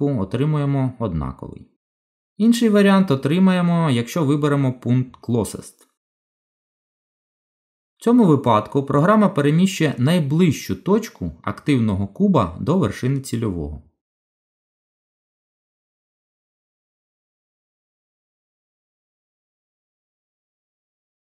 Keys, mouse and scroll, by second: 3.4 click, 14.4 g.